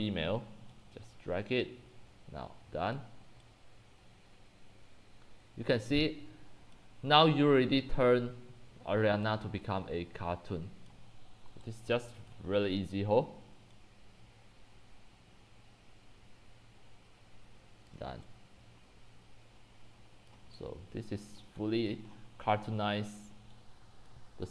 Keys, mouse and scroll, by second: 7.8-9.3 scroll down 8, 10.9 click, 11.7 x, 12.0 c, 12.3 click, 17.9 click, 18.3-21.5 typing, 20.3 click, 21.4 click, 21.9 click, 22.1-23.1 scroll down 26, 23.3-24.5 typing, 24.2 drag.